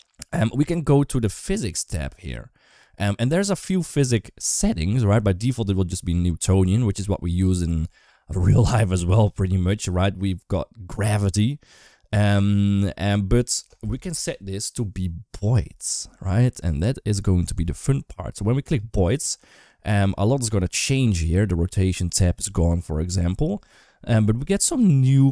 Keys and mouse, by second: 1.2 click, 3.3-7.1 drag, 11.6-18.6 drag.